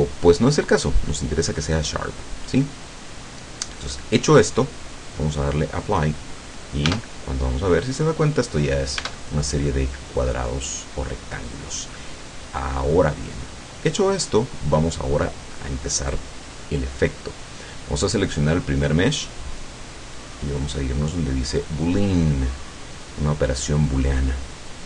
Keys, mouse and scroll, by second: 0.0 click, 1.5 click, 5.9 click, 7.0 Tab, 9.0 Tab, 10.0-13.2 middle drag, 13.4 scroll down 2, 13.6-14.2 middle drag, 14.8 scroll down 2, 16.1 right click, 20.6 click, 23.8 click.